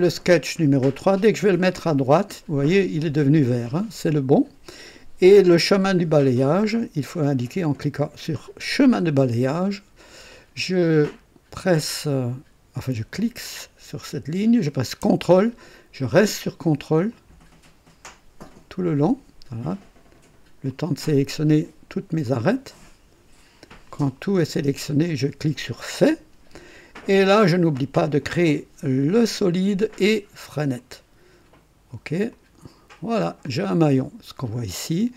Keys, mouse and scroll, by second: 1.6 click, 8.8 click, 13.1 click, 17.1 ctrl+click, 19.0 ctrl+click, 20.7 ctrl+click, 22.3 ctrl+click, 23.9 ctrl+click, 25.9 click, 29.2 click, 30.5 click, 32.3 click, 33.4-34.4 drag.